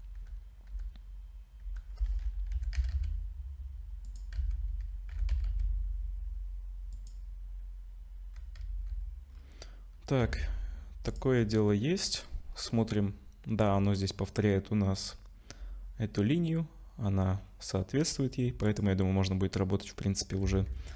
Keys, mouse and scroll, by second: 0.0-2.5 typing, 4.4 z, 5.1 g, 8.6 z, 9.3-10.2 scroll down 4, 10.2 Tab, 11.1 click, 11.4-11.7 scroll down 3, 12.5-13.2 scroll up 5, 18.7 click, 20.4 z.